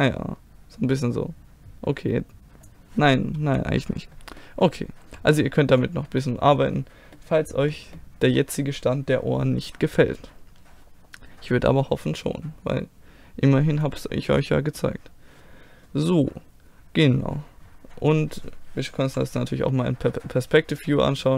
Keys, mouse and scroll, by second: 3.4 ctrl+z, 4.4 middle click, 5.0 a, 7.4-13.3 middle drag, 14.0-19.0 middle drag, 19.0 KP_5, 20.1-21.2 middle drag.